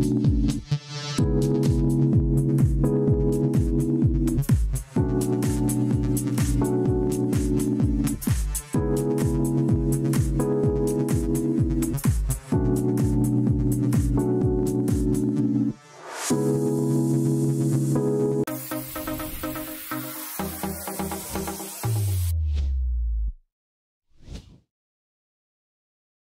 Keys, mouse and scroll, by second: 18.1 click.